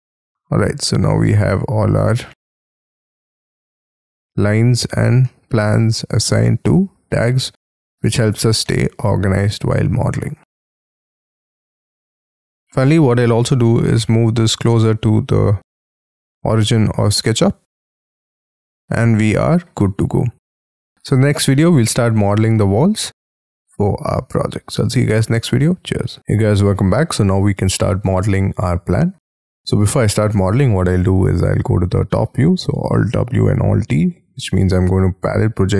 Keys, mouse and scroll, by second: 1.9 double click, 5.2 middle click, 6.3-8.6 scroll down 5, 8.6 middle click, 10.4 Escape, 11.4 middle click, 12.6 scroll down 4, 12.9-13.5 scroll up 8, 13.5 m, 14.8 scroll down 3, 15.1 scroll up 4, 16.6 shift+middle click, 19.9 Escape, 20.1 Escape, 20.5 space, 20.7 scroll up 4, 21.0 Escape, 21.5 middle click, 22.8-26.2 scroll up 5, 26.5-27.0 scroll up 9, 27.2 scroll down 7, 27.7 middle click, 30.2 middle click, 31.7 alt+w, 33.2 alt+t, 34.1 scroll down 1, 35.3 scroll up 4.